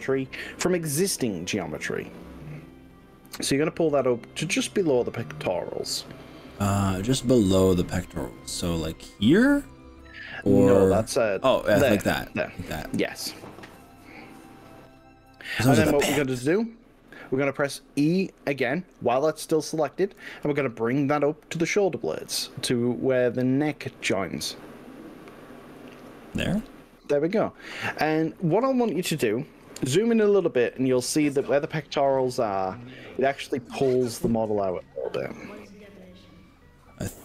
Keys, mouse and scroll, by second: 13.1 click, 20.2 e, 25.9 click, 31.4-31.9 scroll up 3, 32.2 middle click.